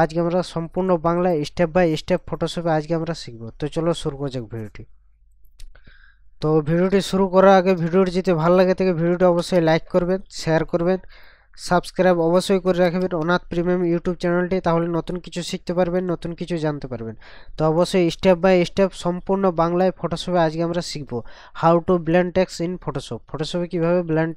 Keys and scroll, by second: 3.5 ctrl+KP_Subtract, 7.6 ctrl+KP_Add, 9.3 ctrl+KP_Add, 12.8 ctrl+KP_Add.